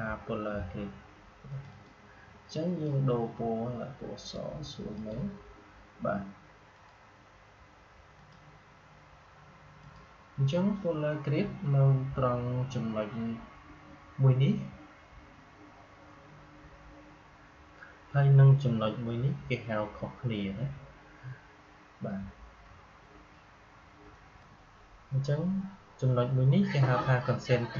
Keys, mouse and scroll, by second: 1.4-8.1 drag, 24.3 click.